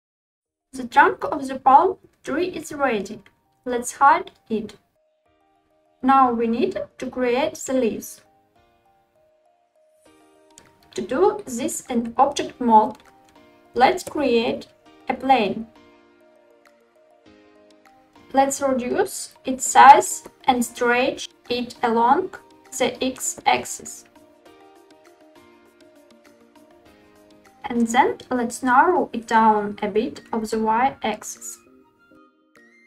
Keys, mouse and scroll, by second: 0.1 click, 3.6 click, 4.2 click, 10.7 shift+a, 15.7-16.2 middle drag, 16.3-16.9 scroll up 4, 17.1-17.7 shift+middle drag, 17.8 s, 20.0 x, 25.2 click, 27.9 s, 29.7 y, 32.0 click.